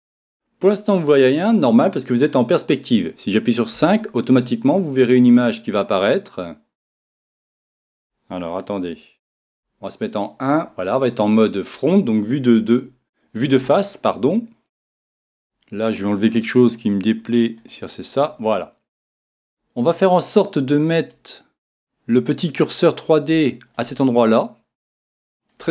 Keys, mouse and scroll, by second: 3.8 KP_5, 5.5-9.6 middle drag, 9.6 KP_1, 11.1-19.1 middle drag, 17.6 click, 22.8-25.7 middle drag.